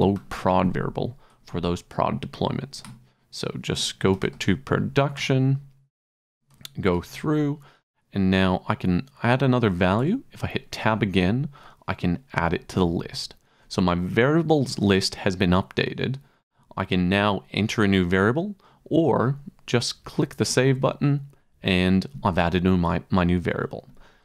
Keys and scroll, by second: 0.0-0.7 typing, 1.4 Tab, 2.8 Return, 3.8-4.8 typing, 5.2 Return, 6.0 Tab, 6.5 Tab, 7.9 Tab, 10.0 Tab, 12.4 Return.